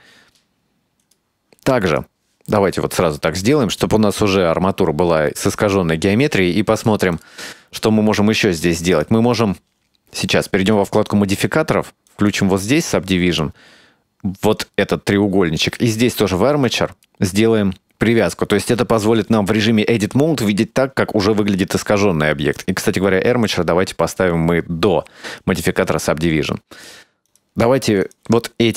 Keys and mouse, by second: 2.0 right click, 2.6-5.8 right drag, 6.9-7.3 drag, 7.7 right click, 8.2 Tab, 9.0 right click, 10.5 click, 12.1 click, 15.8 click, 16.7 click, 22.6 click, 27.3 right click, 28.0 3, 28.1 right click.